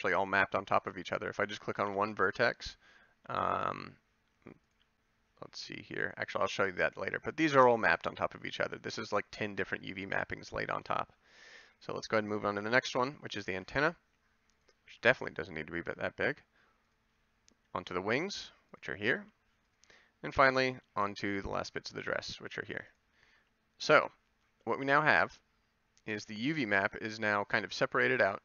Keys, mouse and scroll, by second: 1.8 ctrl+l, 6.7 a, 13.5 g, 14.8 a, 17.7 g, 19.1 a, 22.3 g, 23.3 a.